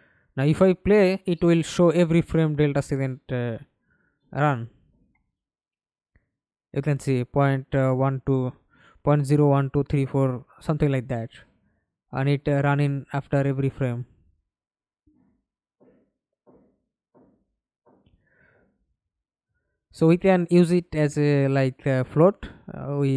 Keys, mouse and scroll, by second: 0.6 alt+click, 2.0 double click, 2.4 double click, 2.8 middle click, 3.5 F11, 4.0 alt+p, 15.1 Escape, 15.9 F11, 20.8 double click.